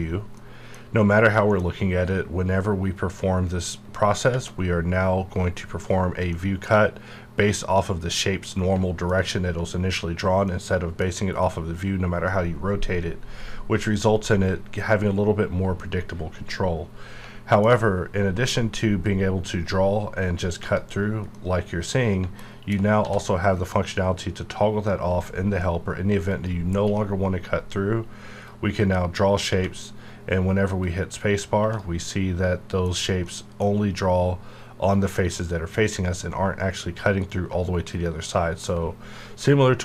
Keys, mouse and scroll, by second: 0.0-0.3 scroll down 1, 0.3 middle click, 6.3-10.5 middle drag, 10.5-19.1 middle drag, 19.1-20.4 drag, 21.3 middle click, 22.4 alt+KP_1, 23.0 d, 26.3 click, 29.5 space, 30.8 click, 31.6 space, 32.1-36.0 middle drag, 36.6 middle click, 36.6-39.8 middle drag.